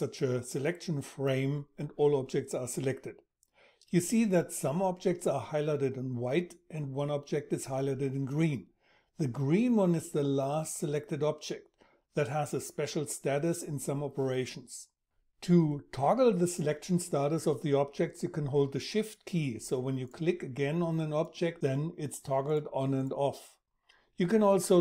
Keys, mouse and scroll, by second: 18.6-24.8 shift+drag.